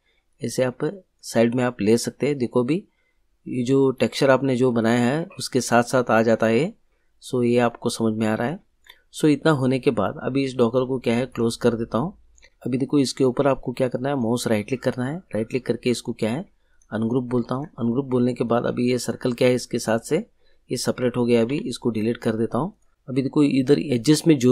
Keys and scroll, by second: 21.4 Delete.